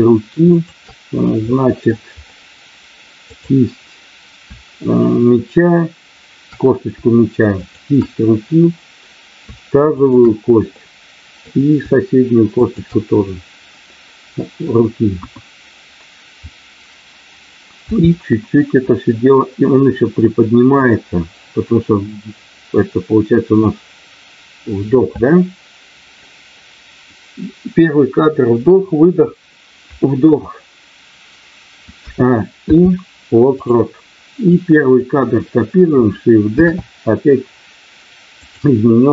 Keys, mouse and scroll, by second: 0.5 shift+click, 1.5 middle click, 3.2 click, 7.6 shift+click, 9.8 shift+click, 10.7 middle click, 12.6 shift+click, 15.1 KP_1, 17.8 g, 20.8 click, 32.6 i, 34.4 click, 36.5 shift+d, 38.4 click.